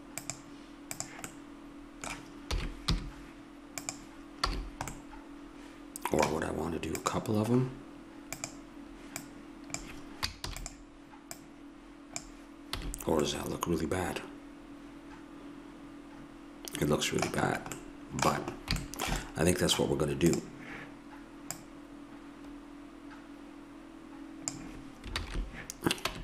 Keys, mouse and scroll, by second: 0.2-1.9 drag, 2.5 s, 4.5 a, 7.0-10.4 drag, 10.4 shift+d, 11.4-12.8 drag, 12.8 a, 13.2 click, 17.8-20.3 middle drag, 20.3-23.4 drag, 25.1 ctrl+z, 26.0 Tab.